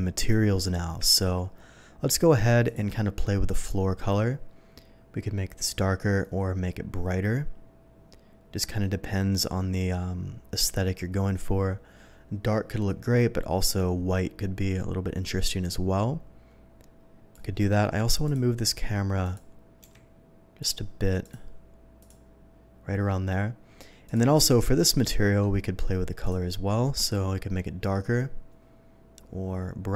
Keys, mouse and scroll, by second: 0.1 click, 1.2 ctrl+s, 2.6 click, 3.4-17.3 drag, 18.2 click, 19.2 click, 20.0 g, 20.5 click, 21.2 click, 21.9 click, 24.0 click, 24.9 middle click, 26.2 click, 27.0-29.9 drag.